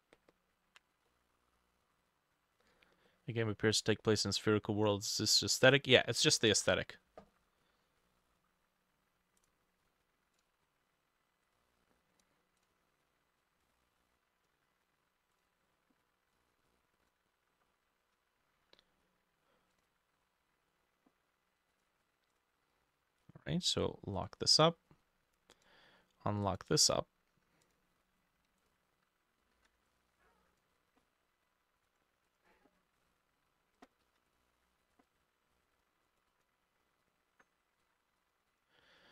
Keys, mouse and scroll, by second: 1.1 middle click, 2.0 scroll down 3, 2.4 scroll up 2, 2.7 middle click, 3.1 middle click, 4.2 scroll down 1, 5.4 middle click, 6.6 ctrl+s, 7.3 middle click, 7.6 scroll up 1, 8.0 middle click, 24.6-26.6 drag, 26.7-28.7 drag, 29.6 ctrl+d, 29.6-39.1 drag, 29.6 middle click, 34.0 ctrl+middle click, 34.1 ctrl+d, 37.9 Escape.